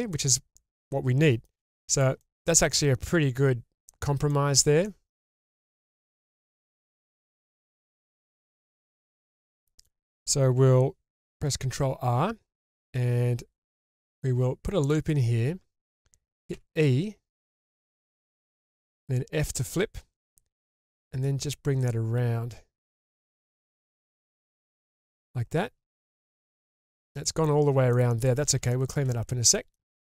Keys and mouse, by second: 0.1-1.5 shift+middle drag, 1.8 middle click, 2.2-2.5 shift+middle drag, 4.0 middle drag, 4.3 shift+middle drag, 4.9-7.1 middle drag, 7.3 shift+middle drag, 8.1-8.4 shift+middle drag, 9.3 middle click, 11.7 ctrl+r, 16.5 e, 18.7 f, 25.1 click, 25.9 shift+middle click, 26.5 shift+middle drag, 26.9-27.5 middle drag, 27.9-28.5 middle drag, 28.7 shift+middle drag.